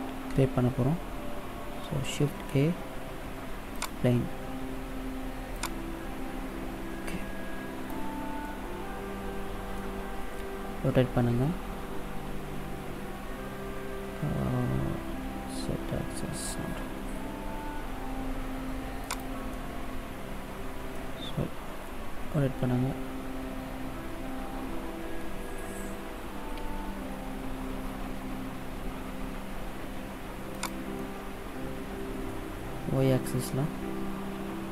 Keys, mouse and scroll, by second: 2.1 shift+a, 5.4 click, 8.2 middle click, 10.7 r, 19.4 middle click, 21.9 r, 30.8 middle click.